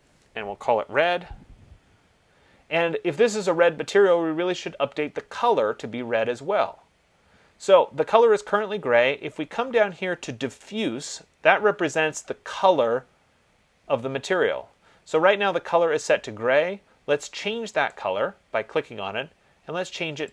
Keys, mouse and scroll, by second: 1.0 Return, 18.1 click.